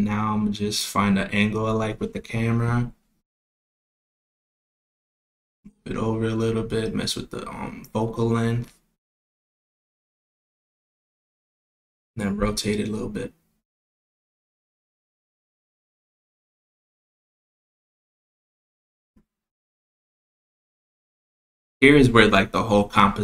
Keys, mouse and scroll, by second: 0.1-1.2 middle drag, 1.2-1.6 scroll up 2, 1.6-2.9 middle drag, 3.1 KP_0, 4.5 click, 5.6 click, 6.3-9.5 drag, 9.5 click, 10.9 middle click, 10.9 click, 11.1 middle click, 11.3-12.0 scroll down 3, 12.0 KP_0, 13.2 g, 16.0 r, 19.2 r, 22.1 r.